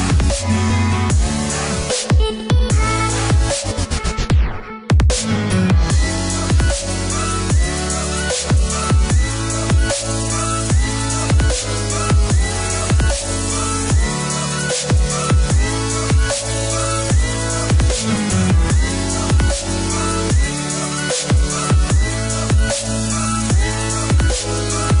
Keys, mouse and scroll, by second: 1.0 click, 4.1 click, 4.7 click, 5.6 KP_4, 5.9 KP_0, 6.2 KP_Enter, 7.1 Escape, 8.3 click, 9.7 click, 11.5 click, 12.0 click, 12.7 KP_4, 13.0 KP_0, 13.3 KP_Enter, 13.7 Return, 13.8 Escape, 15.0 click, 18.9 click, 19.5 Escape, 21.0 click, 22.4 click, 23.9 click, 24.5 Escape.